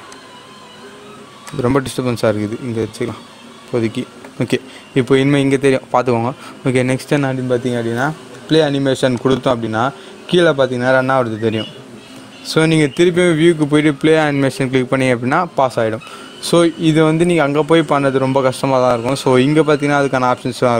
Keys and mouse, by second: 0.1-4.1 drag.